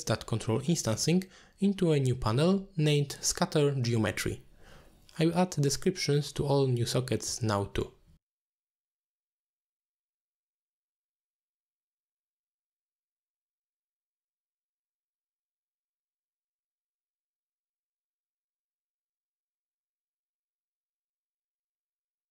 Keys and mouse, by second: 0.2 click, 2.5-3.2 drag, 3.5-9.5 drag, 6.2 BackSpace, 11.3 click, 12.0 click, 12.8 click, 14.4-15.7 drag, 15.4 t, 16.1-17.3 drag, 17.9 shift+click, 18.3 t, 19.5 click, 20.2 click, 20.7 click, 21.5 click, 21.7 shift+click, 22.2 t.